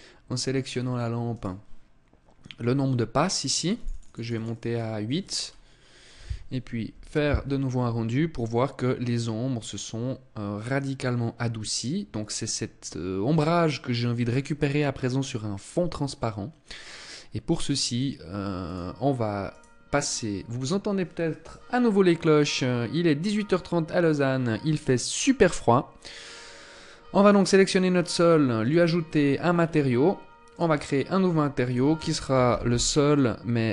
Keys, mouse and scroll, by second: 0.0 scroll down 2, 0.6 right click, 3.0 click, 3.2 click, 3.4 click, 3.5 click, 3.6 click, 3.8 click, 4.0 click, 4.8-5.6 scroll up 2, 18.0 click, 18.8 right click, 26.6 right click, 27.9 click, 28.7-29.5 scroll up 7, 29.8 click, 31.0 click.